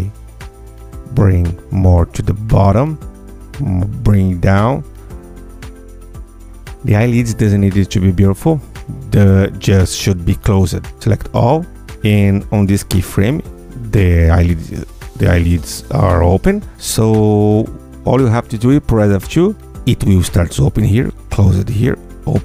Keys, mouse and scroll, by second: 0.4 ctrl+g, 2.6 click, 3.1 click, 3.5 click, 4.3 click, 5.2 click, 6.4 click, 7.3 Tab, 9.6 Tab, 10.0 ctrl+a, 12.2 click.